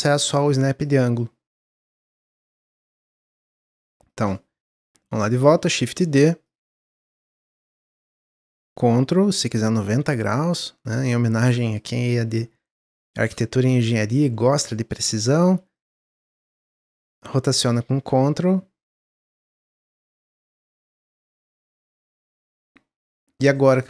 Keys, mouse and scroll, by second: 0.8 click, 4.0 click, 5.5 shift+d, 7.5 click, 10.4 click, 12.1 click, 15.1 shift+d, 16.5-17.5 drag, 19.9 click, 22.5 middle click, 22.6 scroll down 1.